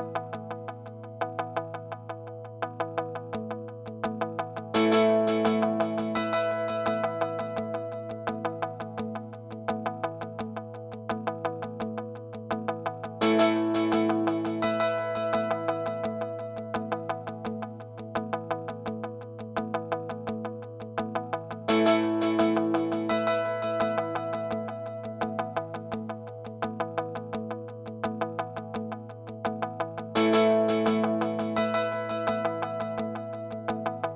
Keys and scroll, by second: 6.6 space, 18.9 super+z.